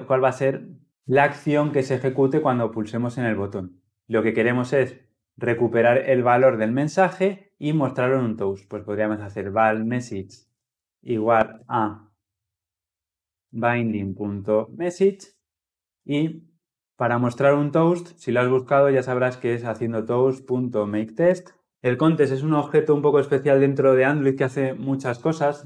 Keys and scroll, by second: 14.6 Return, 21.1 Return, 21.7 ctrl+p.